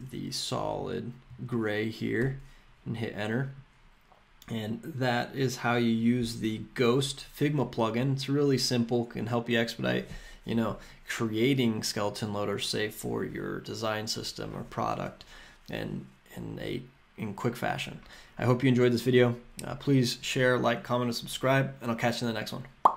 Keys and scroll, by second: 0.8 Tab, 2.2 Return.